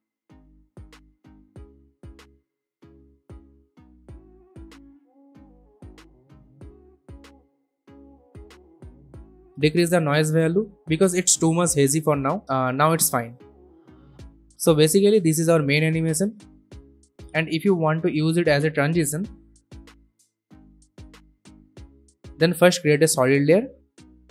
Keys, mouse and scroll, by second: 2.0-7.9 drag, 12.2-12.5 alt+scroll up 1, 12.8 space, 12.9-13.8 click, 13.3 space, 13.9 alt+scroll down 1, 14.8-17.3 drag, 22.4 ctrl+z, 22.5 right click, 23.1 click.